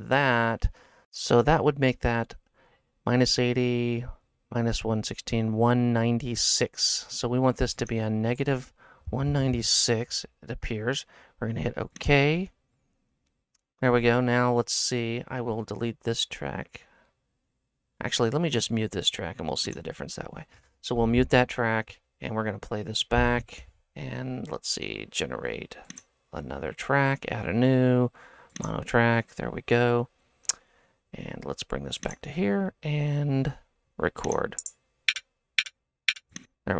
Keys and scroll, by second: 9.2 KP_1, 9.3 KP_9, 9.5 KP_0.